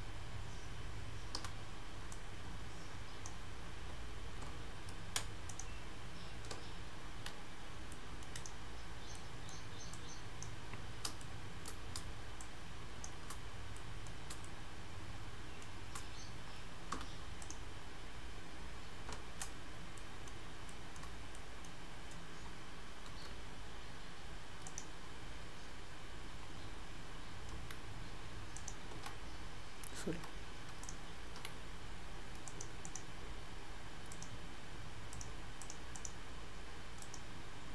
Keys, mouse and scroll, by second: 0.0-1.4 scroll down 4, 1.4 3, 2.1 click, 5.5 right click, 6.6 z, 8.0 middle click, 8.4 click, 9.2 middle click, 10.0 click, 10.8 scroll up 3, 11.2 shift+middle click, 12.5 shift+click, 13.8 middle click, 14.2 scroll up 2, 14.5 shift+middle click, 17.0 p, 19.2 z, 20.0 middle click, 20.6 scroll up 1, 20.7 shift+middle click, 21.4 middle click, 21.8 scroll down 1, 23.1 g, 24.7 right click, 25.7-26.1 scroll down 1, 26.1-27.6 scroll up 1, 27.6 g, 28.6 right click, 30.2 Tab, 30.9 click, 31.4 g, 32.9 right click, 35.6 click, 36.0 right click.